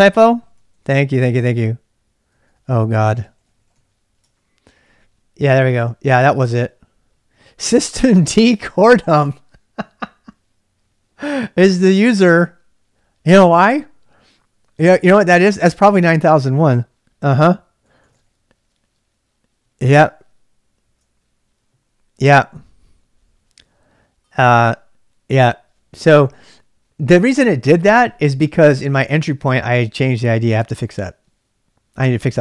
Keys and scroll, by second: 0.0-4.2 typing, 6.2 l, 17.9 typing, 20.3-20.9 typing, 26.0 ctrl+[, 26.1 k.